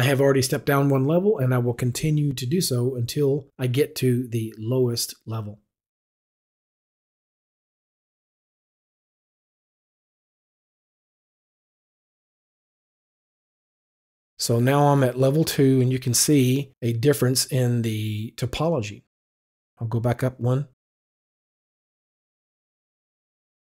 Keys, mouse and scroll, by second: 2.7 click, 7.3 click, 8.7 click, 10.4 click, 12.5 click, 20.4 click.